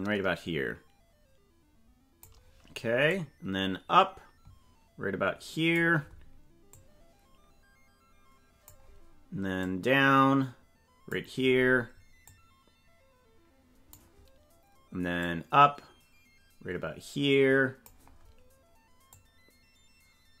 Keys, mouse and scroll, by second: 0.0 click, 3.2-5.8 drag, 6.7-8.8 drag, 9.6-11.2 drag, 17.4 click, 19.2-20.4 drag.